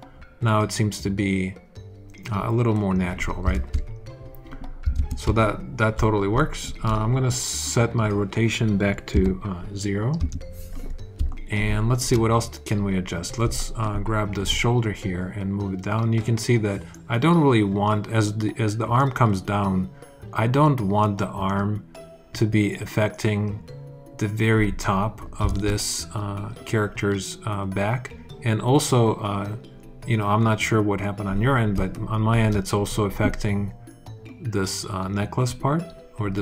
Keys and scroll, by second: 3.4 super+z, 4.8 super+z, 5.8 alt+super+z, 9.0 0, 10.0 Return, 11.0 alt+Return, 25.3 super+z.